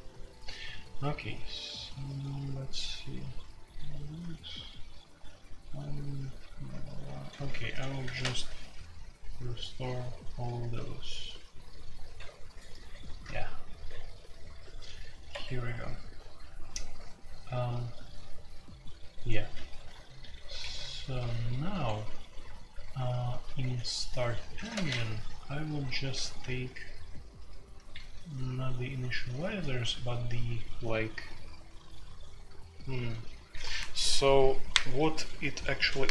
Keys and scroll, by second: 1.3-2.6 typing, 4.1-5.6 typing, 7.1-8.9 typing, 10.0-10.6 typing, 11.9-13.2 typing, 14.3-16.9 typing, 19.3-23.5 typing, 20.6 Escape, 20.7 F2, 24.5-29.9 typing.